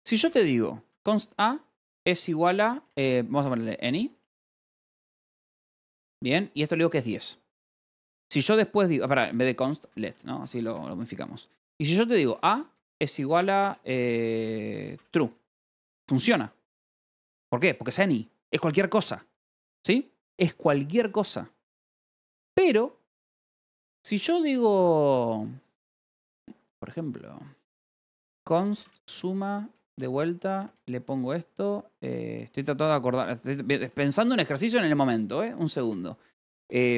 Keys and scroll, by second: 0.0-6.2 typing, 6.5 Return, 6.8 Escape, 7.7 o, 8.9-17.4 typing, 18.7 h, 20.7 j, 21.5 l, 22.3 a, 22.4 Return, 27.6-29.2 typing, 29.8 Return, 31.4 =, 32.0 BackSpace, 33.0 ), 33.1 BackSpace, 33.8 Escape, 34.2-36.9 typing, 35.3 Escape.